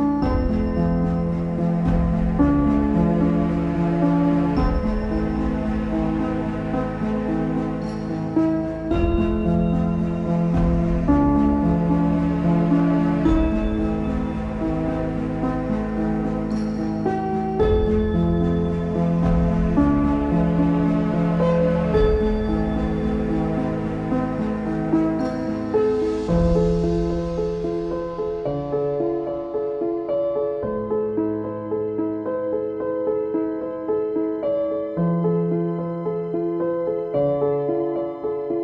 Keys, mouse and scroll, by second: 2.3-4.3 shift+middle drag, 4.3 Tab, 4.8-6.0 middle drag, 6.0 click, 7.6 click, 7.9 z, 8.2 z, 8.6 shift+middle click, 9.2 e, 11.6 click, 12.6 Tab, 13.0 z, 13.2 middle click, 13.9 scroll up 1, 14.1-15.3 middle drag, 15.3 s, 19.6 click, 20.3 click, 21.5 click, 21.8 click, 22.2 Tab, 23.0 middle click, 23.9 click, 24.2-26.3 middle drag, 26.3 shift+click, 26.6 Tab, 27.3 ctrl+a, 27.4 Tab, 28.3 click, 28.6-30.0 shift+middle drag, 30.0 alt+e, 31.7 Tab, 32.9 middle click, 33.2 z, 33.7 click, 34.0-34.6 scroll down 5, 34.6-36.0 middle drag, 36.0 click, 37.3 shift+right click.